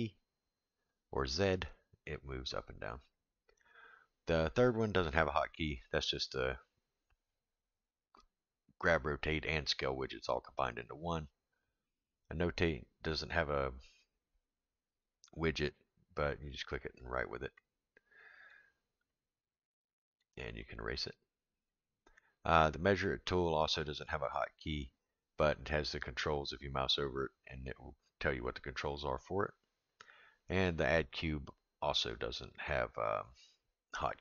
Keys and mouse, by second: 4.5 click, 17.0 click, 18.5 click, 19.2-20.2 drag, 20.6-21.7 drag, 32.7-34.2 drag.